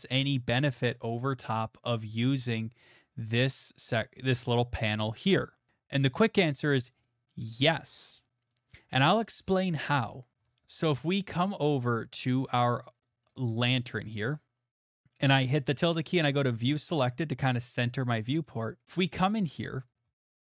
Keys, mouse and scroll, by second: 1.2 click, 2.9 click, 7.0-8.3 drag, 9.0 click, 9.7-10.5 shift+middle click, 10.3 middle click, 10.4 middle click, 10.4 middle click, 10.4 middle click, 11.5 click, 12.1 middle click, 12.2 middle click, 12.7 shift+middle click, 14.7 middle click, 15.2 shift+middle click, 15.7 middle click, 15.7-16.3 scroll, 17.2 shift+middle click, 17.5 shift+middle click, 18.0 middle click, 18.2 middle click, 18.2 middle click, 18.2 middle click, 19.8 click, 20.0 middle click.